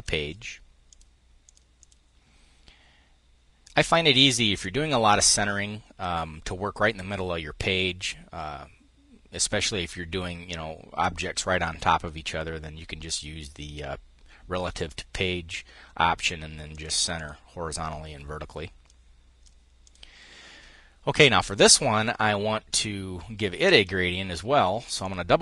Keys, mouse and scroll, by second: 0.5-1.8 drag, 4.1-5.2 drag, 16.3-17.4 drag, 18.5-19.8 drag, 21.2 click, 23.4 click, 24.4 click.